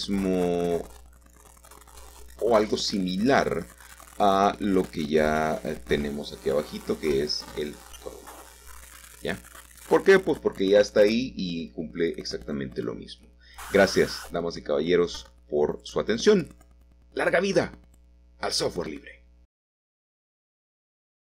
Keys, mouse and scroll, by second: 1.6-3.3 typing, 3.9 Return, 5.3-6.4 drag, 6.5-7.6 drag, 8.5-9.6 drag, 9.7-11.2 drag, 11.2-13.2 scroll down 4, 13.2-14.4 middle drag, 14.4-15.2 scroll down 2, 15.2 shift+middle click, 15.9-17.1 scroll up 1.